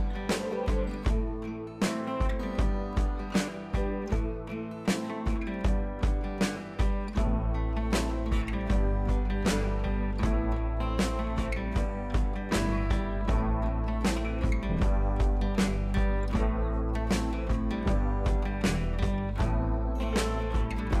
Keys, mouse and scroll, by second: 0.6 scroll down 1, 0.9 space, 1.0 click, 4.5 scroll down 1, 5.6 ], 5.7 ], 6.1 ], 6.5 click, 6.8 ], 7.3 click, 8.2 ], 8.3 ], 8.9 click, 9.8 scroll down 1, 11.3 ctrl+z, 11.7-21.0 drag.